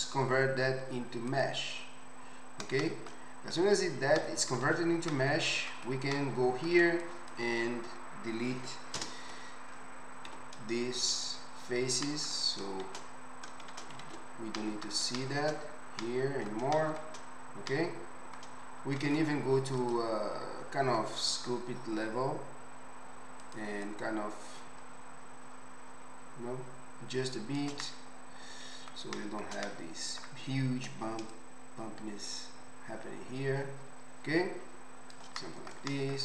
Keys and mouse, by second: 3.7 Tab, 4.7 alt+z, 5.5-7.0 ctrl+alt+drag, 9.0 ctrl+KP_Add, 10.3 x, 12.9 shift+z, 13.7 shift+z, 16.1 middle click, 16.3 middle click, 16.9-21.6 shift+middle drag, 17.1 click, 17.1 right click, 19.0 ctrl+Tab, 28.2 middle click, 29.9-31.2 middle drag, 30.8 click, 30.8 right click.